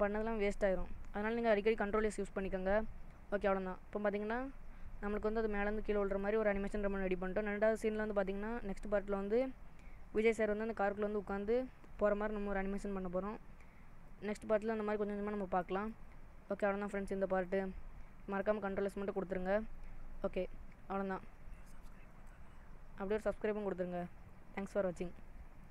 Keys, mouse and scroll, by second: 5.1 click, 6.2 click, 15.8 click, 17.4 click, 19.4 ctrl+s.